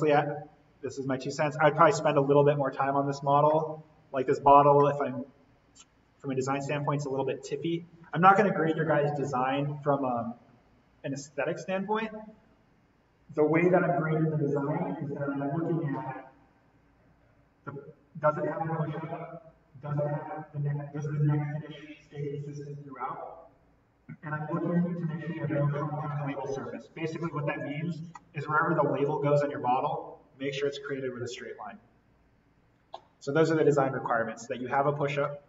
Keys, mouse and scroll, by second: 1.4-3.5 scroll down 1, 3.5 middle click, 4.4-4.7 scroll up 1, 4.7-10.5 middle drag, 27.6 click, 28.1-31.3 middle drag, 34.5 scroll down 1, 34.7 middle click, 35.2-35.4 scroll down 1.